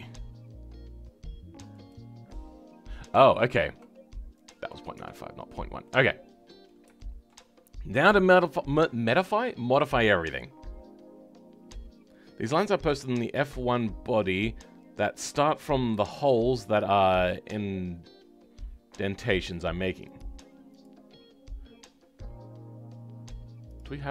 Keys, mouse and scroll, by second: 1.9 click, 4.9 Tab, 5.3 scroll down 2, 5.8-24.1 middle drag.